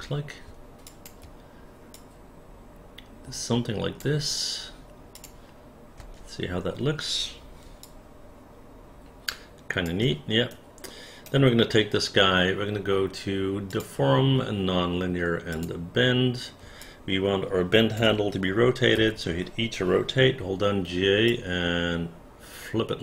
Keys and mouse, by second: 0.9 shift+click, 1.9-4.0 drag, 5.2 click, 6.0 space, 7.9-9.9 alt+drag, 10.5 alt+right click, 15.5 click, 16.9-18.0 alt+drag, 19.0 e, 20.9 j, 21.3-23.0 drag.